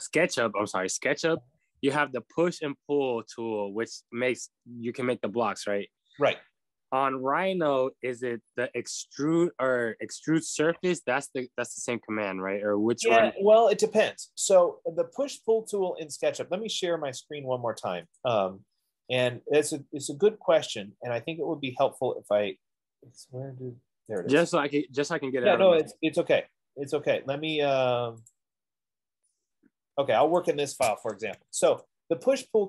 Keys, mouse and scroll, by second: 28.7 click, 30.8 click, 31.6 Escape, 31.6 Escape.